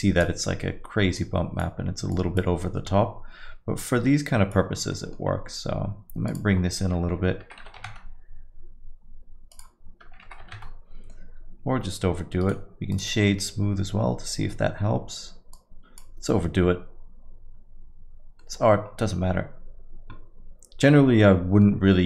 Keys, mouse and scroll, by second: 0.0 click, 1.2 click, 2.2 click, 3.9 click, 4.9 middle click, 5.2-5.9 scroll down 2, 5.7 scroll up 2, 6.3 click, 6.3 scroll up 2, 9.5 click, 12.4 right click, 15.5 click, 18.5 middle click, 18.8-19.4 scroll down 2, 21.2 scroll down 5, 21.2 middle click, 21.9 middle click.